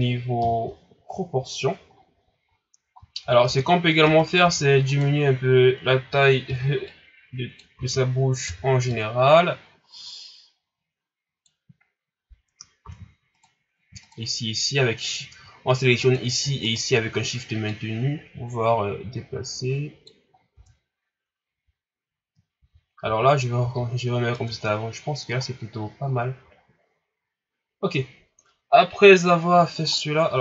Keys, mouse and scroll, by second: 0.3 KP_1, 1.9 scroll up 7, 2.5-3.2 scroll down 2, 3.2 scroll up 1, 3.4 Tab, 4.0 Tab, 4.2 right click, 4.4 Tab, 4.9 right click, 6.4 o, 6.8 click, 7.7 ctrl+z, 8.4 o, 8.9-11.9 drag, 12.8 ctrl+z, 13.3 right click, 14.0 shift+right click, 16.0 right click, 16.6 shift+right click, 17.6-20.3 drag, 20.3 scroll down 3, 20.5 Tab, 21.5 a, 22.2-22.6 scroll up 1, 22.6 ctrl+z, 23.1 ctrl+z, 23.6 ctrl+z, 24.3 Tab, 24.6 scroll down 2, 25.2 scroll up 5, 25.8 scroll down 4, 26.9 scroll down 2, 27.4 scroll up 1, 29.8 scroll up 3, 30.3 Tab.